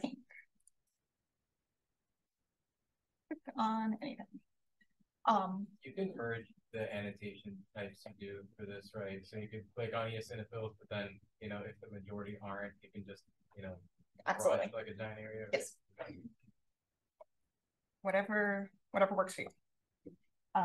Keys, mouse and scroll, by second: 0.5 drag, 1.5 drag, 2.2 click, 3.1 click, 3.8 click, 4.4 click, 17.0 space, 17.3 click, 18.0 click, 18.6 click, 19.2 click, 19.7 click.